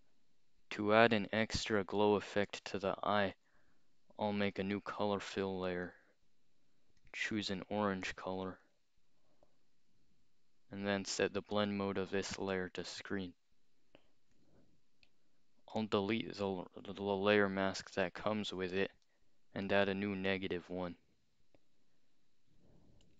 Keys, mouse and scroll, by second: 3.4 click, 4.5 click, 5.9 click, 7.0 click, 8.7 click, 10.9 click, 12.3 click, 14.4 click, 15.1 right click, 17.3 click, 18.2-19.2 scroll down 2, 19.7 alt+click, 20.2 scroll up 2, 23.0 ].